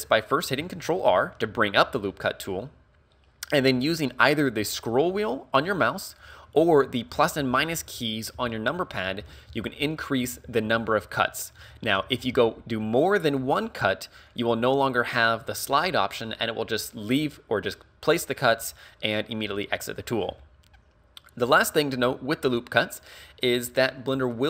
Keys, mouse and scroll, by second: 0.6 ctrl+r, 14.4 click, 22.7 middle click.